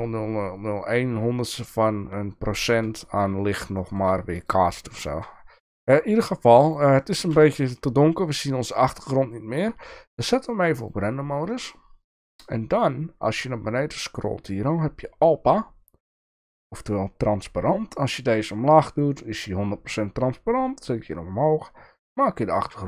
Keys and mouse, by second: 3.8 shift+middle click, 5.1 shift+middle drag, 10.9 click, 16.9-22.8 drag.